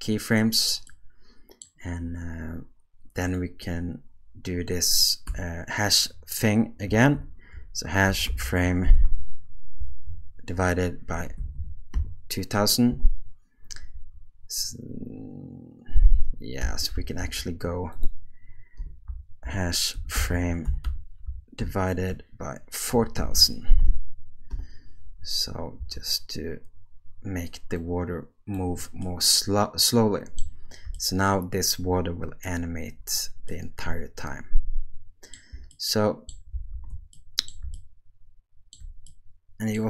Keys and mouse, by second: 1.0 middle click, 3.3-13.0 drag, 11.5 0, 13.9 space, 16.6 space, 17.2 ctrl+z, 18.0-24.6 drag, 23.3 0, 25.8 space, 27.8 click, 29.0-30.4 middle drag, 33.5-35.4 middle drag, 36.3 middle click, 36.7 alt+a, 37.2 middle click, 39.1 middle click.